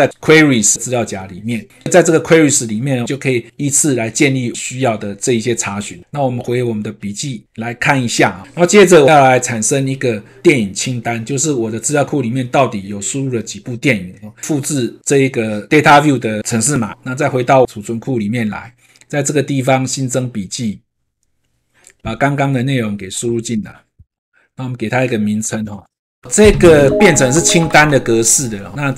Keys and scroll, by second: 23.5 ctrl+v.